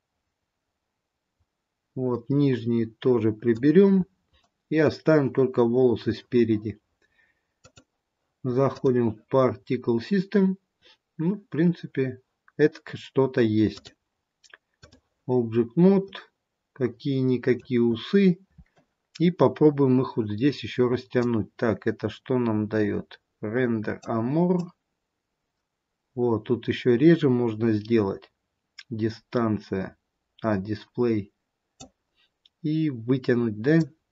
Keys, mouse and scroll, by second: 4.3-4.6 scroll down 2, 4.6 middle click, 11.3-13.7 scroll down 1, 13.7 click, 13.7-14.4 scroll down 2, 16.2 middle click, 18.1-19.1 scroll up 2, 33.8 click.